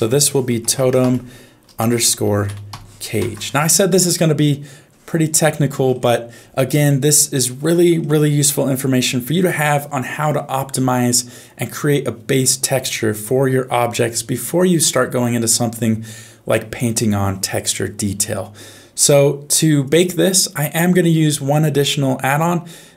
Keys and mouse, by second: 7.3 shift+middle click.